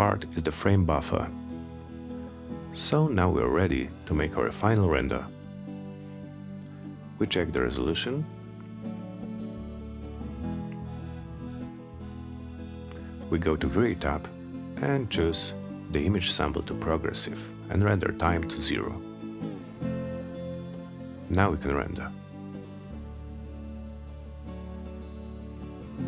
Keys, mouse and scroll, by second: 2.2 click, 12.7 click, 18.6 click, 21.0 click, 22.8 click, 24.7 click.